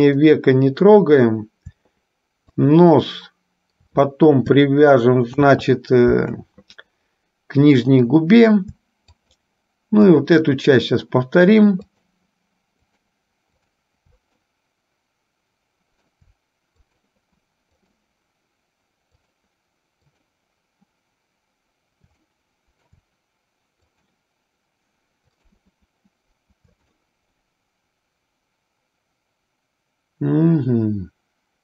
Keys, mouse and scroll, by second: 0.5-1.5 middle drag, 2.7 shift+click, 5.5 ctrl+z, 9.3 shift+click, 12.1 shift+click, 13.1 shift+click, 15.2-16.3 middle drag, 17.1 shift+click, 19.3-20.3 shift+drag, 22.3 middle click, 24.1 shift+click, 25.6 shift+click, 27.2-31.6 middle drag.